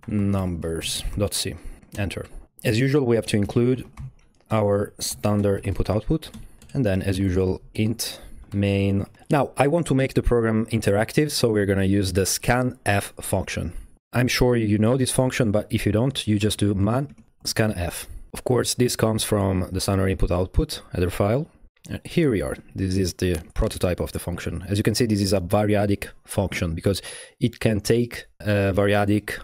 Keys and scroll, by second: 0.0-2.3 typing, 3.4 alt+à, 3.5-9.5 typing, 4.5 Down, 4.7 Return, 6.3 Return, 6.6 Right, 13.9 Right, 13.9 typing, 16.5-18.0 typing.